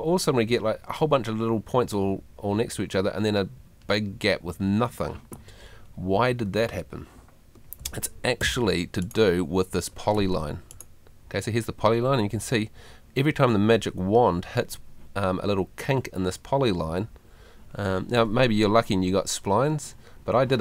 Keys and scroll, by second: 7.8 Escape, 10.2 Tab.